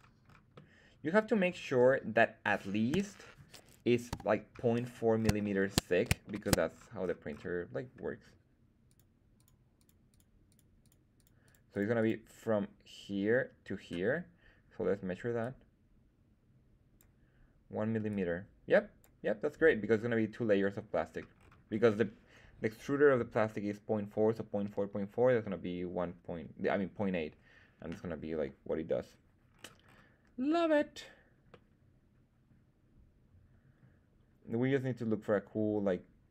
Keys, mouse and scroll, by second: 0.5 middle click, 1.4-2.0 scroll down 3, 2.9 /, 4.0 KP_1, 4.8-5.6 scroll up 4, 5.3 shift+middle drag, 6.2 shift+middle click, 6.7-8.1 scroll up 3, 8.8 click, 9.3 click, 9.7 click, 10.0 click, 10.4 click, 10.7 click, 11.1 click, 11.4 click, 11.6 click, 11.9 click, 15.3-16.9 drag, 18.0 click, 21.3-23.5 scroll down 3, 23.5-24.8 scroll down 1, 29.5-31.4 scroll down 2, 31.4 scroll down 2, 31.4-36.3 middle drag.